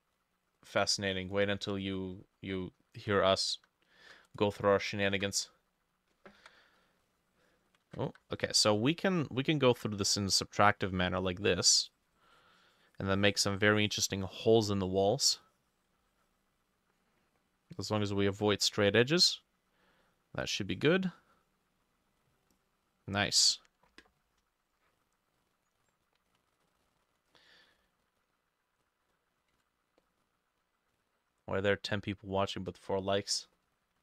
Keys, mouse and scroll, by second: 1.2 double click, 3.6 e, 4.1 e, 5.1 ctrl+shift+a, 6.4 b, 7.9 ctrl+z, 8.1 e, 9.8-18.9 drag, 18.9 e, 26.6 ctrl+middle click, 27.3 middle click, 28.9 scroll up 1, 29.1-29.4 scroll down 1, 29.5 ctrl+s, 33.3 middle click, 33.6 scroll up 1.